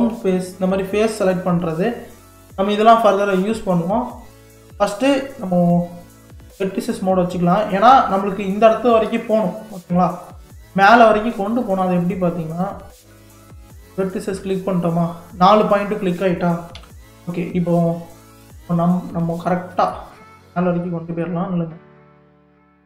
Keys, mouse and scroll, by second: 0.3 click, 0.7 click, 4.1 click, 4.7 middle click, 5.1-6.2 scroll up 1, 6.2 KP_3, 7.5 click, 7.9-8.8 scroll down 5, 8.8-10.8 shift+middle drag, 10.8-11.5 scroll up 5, 11.5-12.6 shift+middle drag, 12.6 click, 14.0-16.8 middle drag, 16.8 KP_3, 19.5-20.7 shift+middle drag, 20.7-22.0 scroll down 2, 22.0 scroll down 1, 22.3 g.